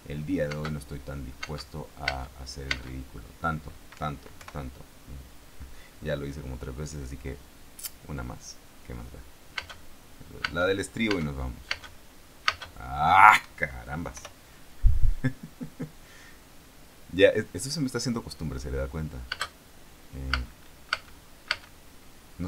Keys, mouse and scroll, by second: 0.9 space, 1.8 space, 4.3 Escape, 4.7 p, 9.9 space, 10.8 space, 12.6 space, 12.8 space, 13.7 Escape, 14.5 p, 19.7 space, 20.7 space.